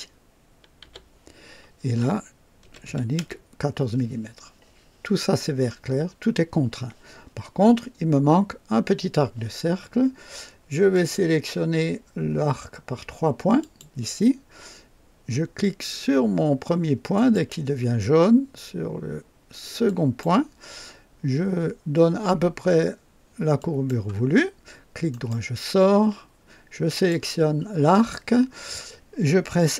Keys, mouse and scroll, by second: 0.8 i, 2.6 KP_1, 2.8 KP_4, 3.1 KP_Enter, 10.9 click, 13.6 click, 17.1 click, 19.8 click, 23.6 click, 25.1 right click, 26.9 click.